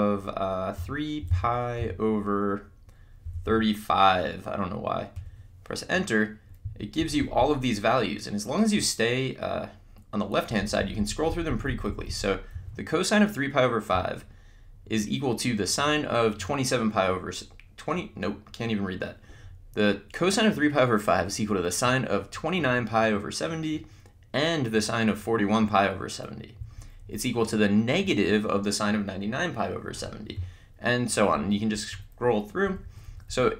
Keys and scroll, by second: 0.5-1.8 typing, 3.0-3.9 typing, 5.2 Return, 6.6 Down, 7.0 Left, 26.6 Down, 32.6 Up.